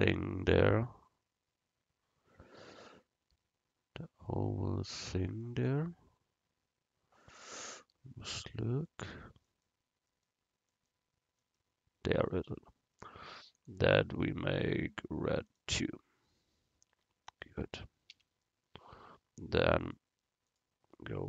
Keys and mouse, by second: 5.7-7.6 middle drag, 8.9-12.3 right drag, 12.4-13.5 middle drag, 13.6-15.5 middle drag, 17.0 Tab, 17.7 Tab, 18.2 a, 19.8-21.2 drag.